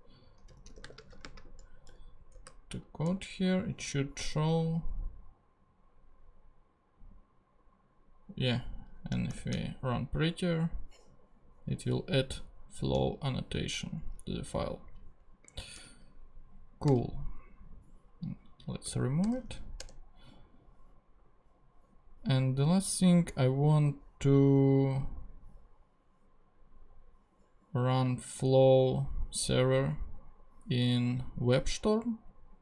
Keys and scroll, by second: 0.0-3.0 typing, 2.7 Right, 9.3 shift+super+p, 15.8 super+a, 17.9 BackSpace, 19.2 super+BackSpace, 19.8 super+Return, 20.5 Return.